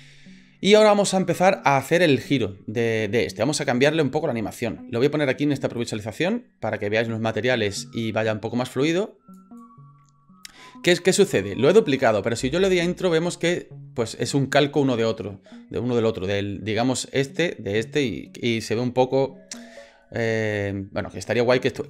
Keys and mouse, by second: 8.9 click, 9.6-11.2 drag, 12.4 space.